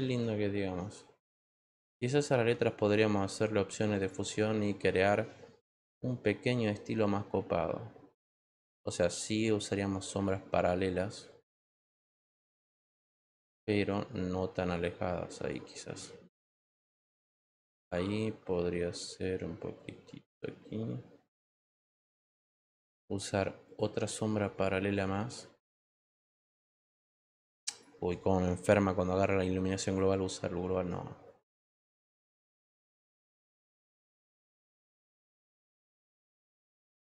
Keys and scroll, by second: 0.0 ctrl+z.